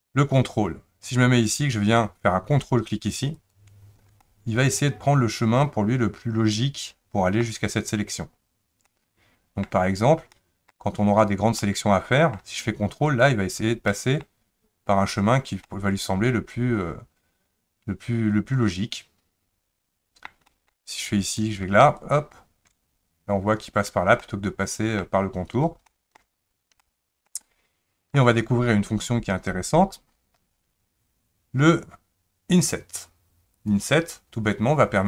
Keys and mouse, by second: 3.3 ctrl+click, 4.2-7.4 middle drag, 8.9 middle click, 10.3 middle click, 11.6 middle click, 13.2 ctrl+click, 13.9 middle click, 15.7-20.3 middle drag, 20.5 middle click, 21.3 click, 22.0 ctrl+click, 24.2 middle click, 25.9 shift+middle click, 26.8 shift+middle click, 27.4 middle click, 33.7 click.